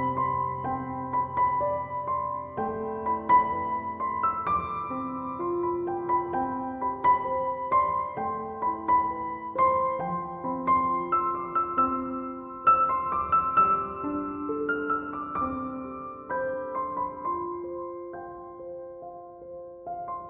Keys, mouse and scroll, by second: 3.2 m, 3.3 o, 5.1 BackSpace.